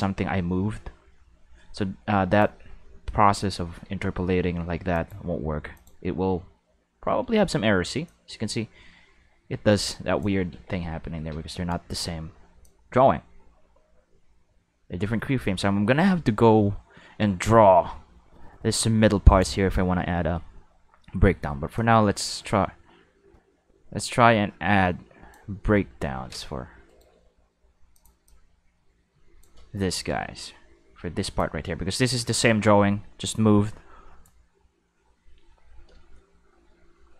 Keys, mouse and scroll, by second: 3.7 Tab, 4.5 a, 4.9 click, 5.7 click, 8.0-10.2 drag, 10.5 ctrl+z, 11.3 ctrl+z, 12.6-19.4 drag, 20.1 middle click, 21.3 middle click, 21.7-25.3 drag, 26.9 right click, 27.1 g, 27.9 click, 28.2-29.4 drag, 29.9 a, 31.4-34.2 drag.